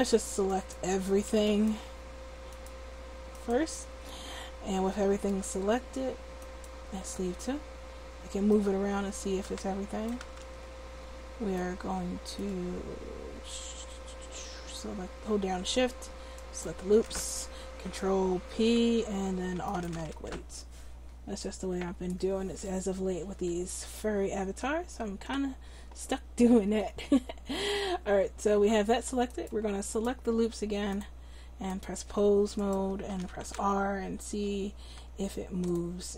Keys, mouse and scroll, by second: 7.1 right click, 8.5-9.8 drag, 10.5 ctrl+z, 18.5 ctrl+p, 32.6 click, 33.4-35.7 right drag, 33.4 r.